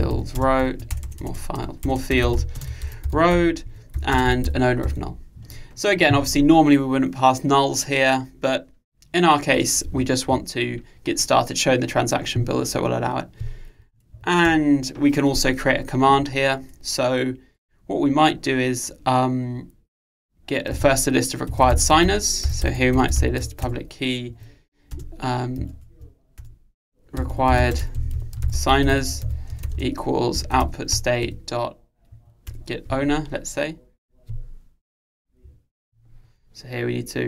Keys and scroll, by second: 23.7 Return, 25.8 alt+Return, 30.9 Return.